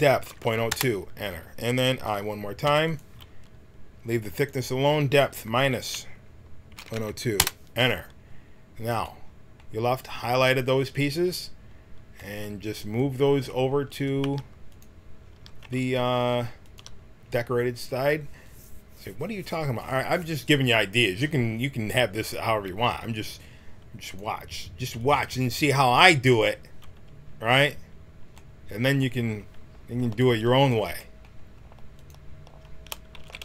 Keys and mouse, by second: 4.3-6.7 drag, 14.2 g, 15.3 g, 24.0 click, 25.0 click, 27.3-30.1 middle drag, 30.1-33.2 drag, 33.2 ctrl+z.